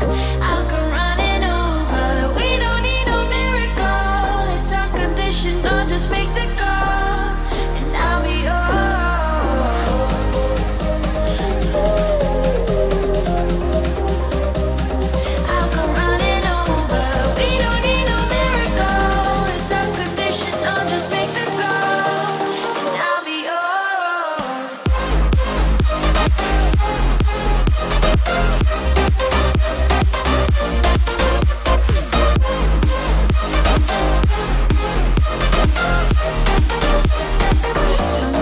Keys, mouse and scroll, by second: 0.3-1.0 typing, 1.4 Return, 2.3 click, 3.1-4.5 typing, 4.1 Return, 5.1 scroll up 1, 5.4 shift+middle click, 6.8 middle click, 7.9 click, 10.0-11.1 typing, 11.6 Return, 12.3 click, 15.0 space, 15.6 r, 17.2 click, 18.2 space, 18.5 e, 18.8 click, 19.1 space, 19.2 click, 20.1 ctrl+c, 20.5 p, 20.9 click, 21.9 space, 22.3 click, 22.8 z, 23.2 shift+e, 23.5 space, 24.4 click, 26.2 right click, 26.9 click, 28.0 scroll up 1, 28.4 f, 28.7 click, 29.7-31.1 typing, 31.5 Return, 32.2 click, 32.8 ctrl+x, 33.4 p, 34.7 click, 35.4-35.9 scroll up 1, 35.9 click, 37.4-38.4 typing.